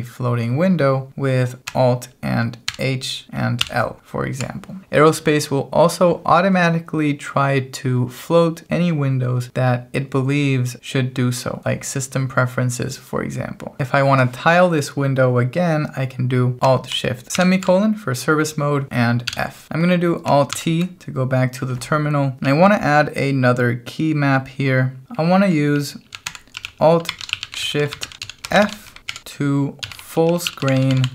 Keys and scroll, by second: 2.6 alt+h, 3.6 alt+l, 17.3 alt+shift+;, 19.3 f, 20.5 alt+t, 22.4-31.1 typing.